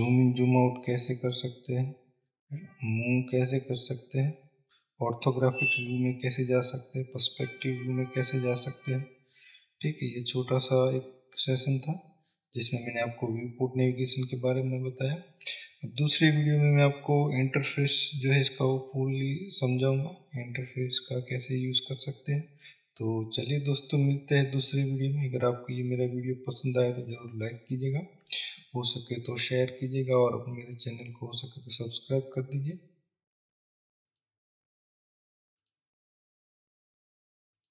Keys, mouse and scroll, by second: 0.6 click, 5.9 click, 6.7 click, 10.3-37.7 middle drag, 11.3 scroll up 2, 32.9-34.3 scroll up 2, 34.3-36.4 scroll up 1, 36.4-36.9 scroll up 1.